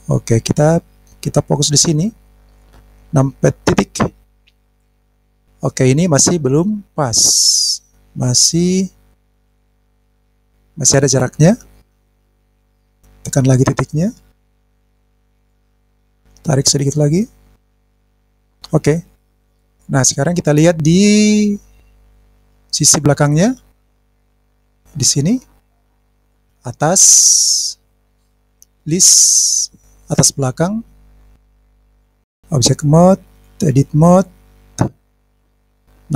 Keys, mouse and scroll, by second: 1.9 click, 3.7 KP_Decimal, 4.6-5.0 scroll down 3, 5.0 scroll up 1, 7.0-7.7 scroll down 2, 7.4-7.7 scroll up 1, 7.7-9.6 scroll down 7, 9.7 click, 10.3-11.0 scroll down 2, 12.5 scroll down 2, 12.8 shift+click, 13.9 shift+click, 14.5 shift+click, 15.7 middle click, 15.7 scroll up 2, 16.5 click, 17.7 click, 18.9 click, 19.4-19.8 scroll down 3, 19.6 scroll up 1, 19.8-20.8 middle drag, 21.2-21.8 scroll down 4, 21.7 scroll up 1, 22.0-22.8 scroll down 3, 23.9 scroll down 1, 24.0 middle click, 35.3 click.